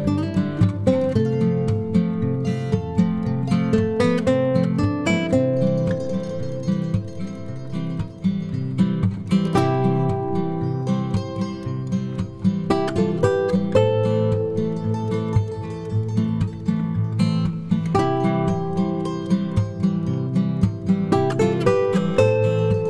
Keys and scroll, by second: 7.4 ctrl+-, 7.8 +, 8.9-9.5 typing, 13.5 -, 13.9 space, 15.1 b, 20.0 b, 20.9 s, 21.4 ctrl+d, 22.2 ctrl+*.